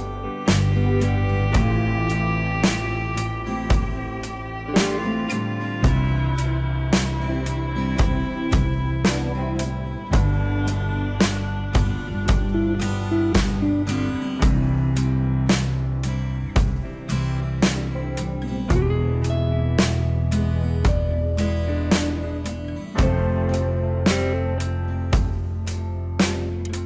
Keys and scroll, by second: 8.6 alt+w, 10.5 F4, 12.3 alt+w.